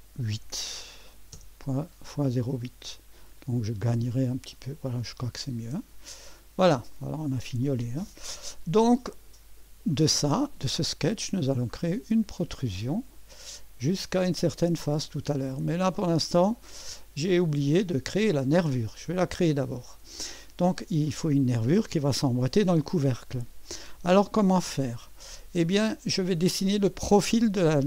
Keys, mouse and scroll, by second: 0.3 KP_8, 1.3 Return, 3.2 click, 5.7 click, 6.9-8.2 drag, 9.0 click, 12.3 click, 15.4 click, 16.8-19.1 drag, 19.6-21.5 scroll down 1, 24.4 click.